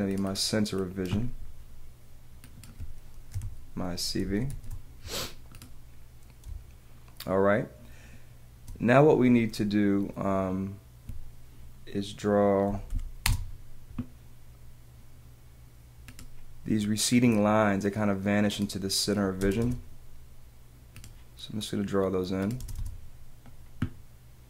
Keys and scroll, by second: 4.2 c, 5.3 v, 6.4 space, 12.6 p, 13.2 l, 19.4 space, 22.6 space.